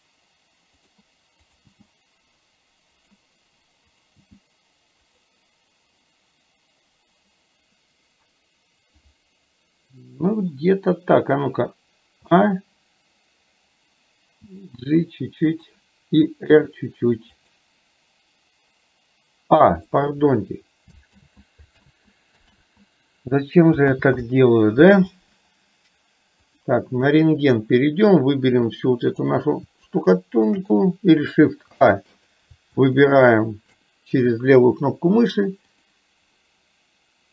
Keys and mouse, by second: 1.5 click, 3.9 click, 14.5 g, 16.6 r, 19.8 click, 21.3 ctrl+z, 22.0 ctrl+z, 22.6 ctrl+z, 27.6-29.4 drag, 30.0 shift+click, 32.3 click, 33.1 click, 33.1 shift+a.